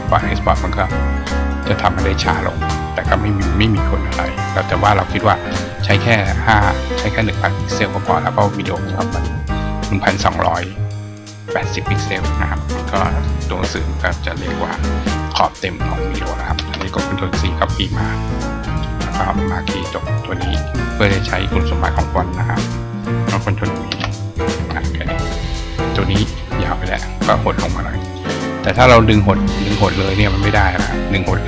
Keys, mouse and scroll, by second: 2.5 click, 4.7 click, 17.1 click, 18.6 click, 20.4 click, 26.1 click, 26.6 click, 27.9 click, 30.0 click, 31.2-31.4 drag.